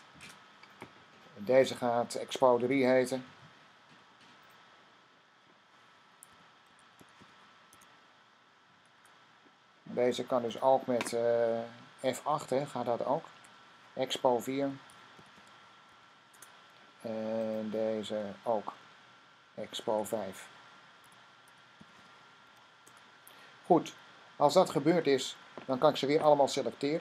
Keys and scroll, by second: 6.0-7.7 typing, 13.0 F8, 14.5-15.8 typing, 19.7 F8, 20.7-22.9 typing.